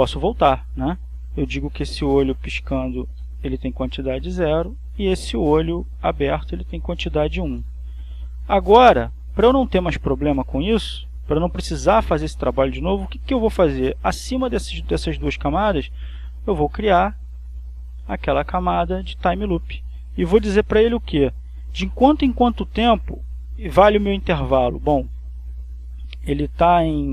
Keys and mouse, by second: 1.6 click, 3.1 0, 3.5 Return, 4.8 click, 6.8 click, 7.7 1, 7.9 Return, 9.2-14.2 drag, 14.6 click, 16.1 right click, 19.7 click, 24.9 click, 26.1 click.